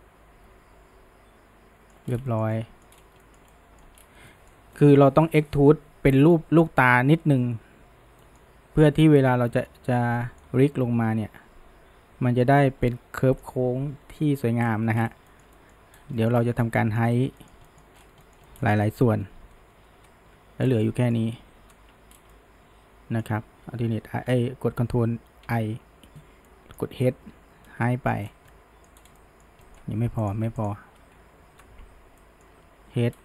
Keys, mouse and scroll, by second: 2.1 scroll, 2.3-2.9 shift+middle drag, 2.9-3.3 scroll up 1, 3.3-4.0 shift+middle drag, 4.0-4.3 scroll down 1, 4.3-7.3 middle drag, 8.2-14.7 middle drag, 14.7-15.3 scroll up 1, 15.3-16.0 shift+middle drag, 16.0-17.4 scroll down 3, 16.2 middle click, 16.8 middle click, 17.4-18.0 shift+middle drag, 18.0 scroll down 1, 18.3-19.0 shift+middle drag, 19.0 ctrl+KP_Add, 20.8-21.6 middle drag, 21.6 ctrl+KP_Add, 22.3-25.4 middle drag, 25.5 ctrl+i, 26.5-27.3 middle drag, 27.3 h, 27.7 scroll down 1, 27.9-28.2 middle drag, 28.2 scroll up 1, 28.5-29.0 middle drag, 29.0 scroll, 29.2-30.3 middle drag, 30.3 click, 30.6 alt+shift+click, 31.5 ctrl+KP_Add, 32.2 middle click, 32.8 h, 33.1 scroll down 1.